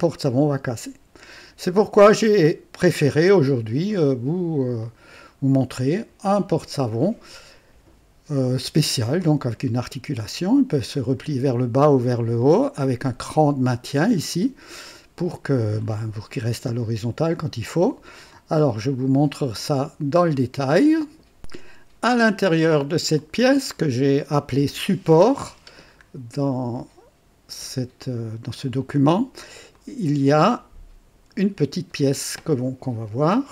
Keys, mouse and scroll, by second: 3.9 right click, 4.8 click, 9.2-9.8 drag, 10.8-11.4 drag, 12.4-13.1 drag, 14.3-15.2 drag, 15.9-16.6 scroll up 3, 17.3 click, 18.3-20.6 drag, 20.8 right click, 22.6 click, 23.2-25.3 drag, 26.0 scroll up 2, 28.6 click, 29.7-32.0 drag.